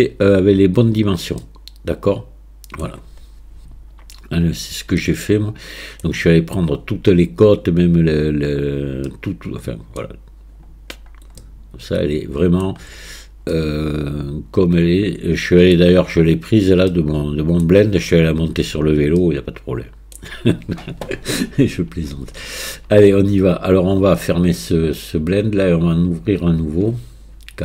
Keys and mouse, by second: 1.5-2.9 middle drag, 5.0-6.1 middle drag, 9.1-10.0 middle drag, 11.4-12.7 middle drag, 13.6-15.8 middle drag, 16.9-17.7 middle drag, 19.2-20.2 middle drag.